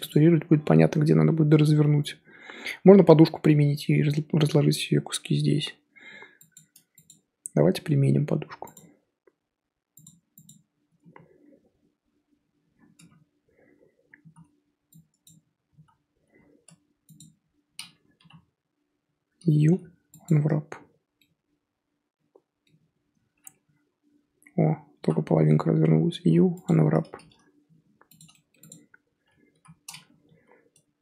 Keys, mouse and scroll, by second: 0.1 click, 5.1 Tab, 5.8 Tab, 6.5 click, 6.7 Tab, 7.1 click, 7.3 Tab, 7.9 Tab, 10.4-10.9 drag, 10.9 Tab, 11.1 a, 12.9 Tab, 13.1 scroll down 1, 13.1 scroll up 1, 13.6 scroll down 1, 14.3 z, 14.6 scroll down 1, 15.2 click, 15.8 z, 15.9-16.5 scroll up 3, 16.6 Tab, 17.1 click, 18.1 l, 20.2 u, 21.1-24.9 middle drag, 24.9 l, 26.6 u, 27.6 g, 28.7 click, 29.5 l, 30.3 r.